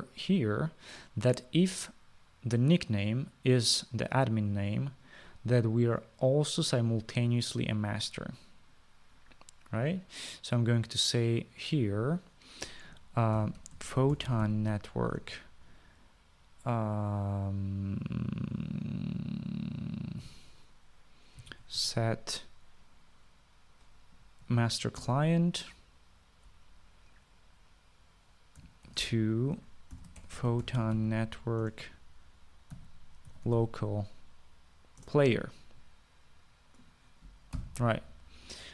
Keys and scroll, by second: 14.4-16.2 typing, 16.4 Return, 21.3-23.5 typing, 25.7 Down, 25.8 Down, 26.3 Return, 29.9-32.7 typing, 32.9 Return, 33.8-35.3 typing, 36.3 Return, 38.6-38.7 typing.